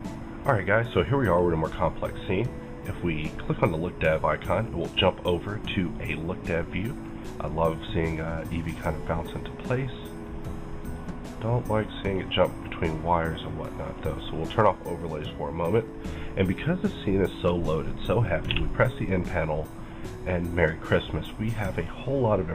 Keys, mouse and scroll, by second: 3.5 click, 4.6-10.1 middle drag, 9.5 click, 10.1 click, 10.8 click, 11.4-14.3 middle drag, 13.8 click, 14.3-17.0 middle drag, 16.5-16.9 scroll up 1, 17.0-19.7 middle drag, 18.6 n, 19.7 click.